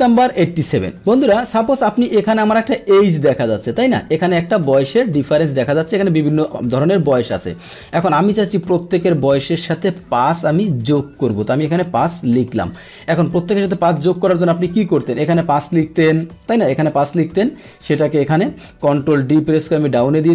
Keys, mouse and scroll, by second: 1.0 click, 1.9-2.2 drag, 2.7-3.9 drag, 4.8 click, 7.5 click, 8.4-10.6 drag, 11.3 click, 12.7 click, 14.0 click, 15.1 click, 17.0 click, 17.5-19.1 drag, 19.5 ctrl+d.